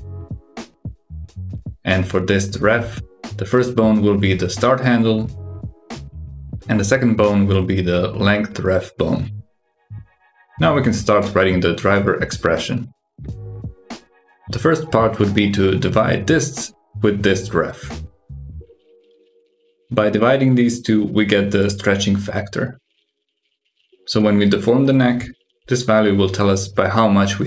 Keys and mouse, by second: 0.0 click, 1.3-4.1 drag, 4.7-8.3 drag, 12.9-14.8 drag, 14.8 BackSpace, 16.1-19.6 drag, 21.2 click, 24.6 click, 25.1 click, 25.6 g.